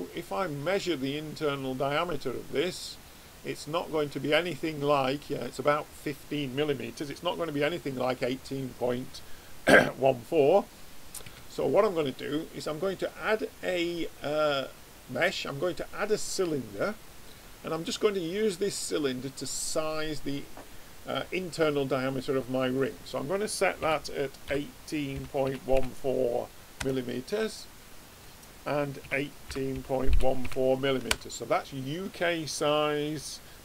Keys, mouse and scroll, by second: 0.6 click, 12.9 click, 19.7 click, 22.7 click, 28.1 click.